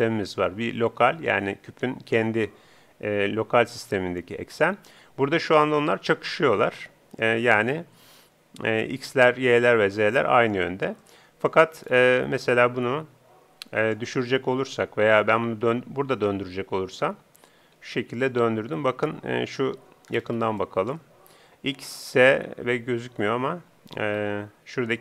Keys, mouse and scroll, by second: 5.4-7.1 middle drag, 11.0-14.0 middle drag, 16.2 r, 20.1-20.6 scroll up 2, 20.2 middle click, 20.6-22.2 middle drag, 24.2 z.